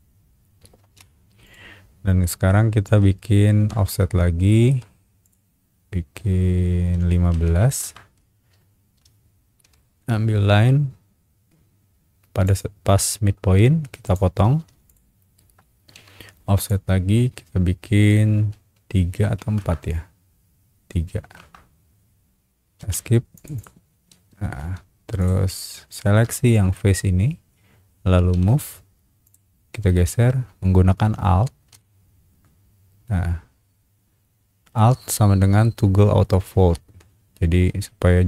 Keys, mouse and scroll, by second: 0.8 space, 1.4 click, 2.2 middle click, 2.9 scroll up 1, 3.6 f, 4.2 scroll down 1, 4.5 shift+middle click, 5.2 click, 7.4 KP_1, 7.6 KP_5, 7.8 KP_Enter, 9.6 l, 9.6 l, 12.4 click, 14.0 click, 14.6 space, 14.8 click, 15.9 f, 16.6 click, 19.4 KP_4, 19.6 KP_Enter, 21.1 KP_3, 21.4 KP_Enter, 22.8 Escape, 23.3 click, 23.5 click, 24.6 space, 25.2 click, 25.9 shift+click, 26.4 shift+middle click, 27.0 scroll up 1, 28.3 shift+m, 29.2 click.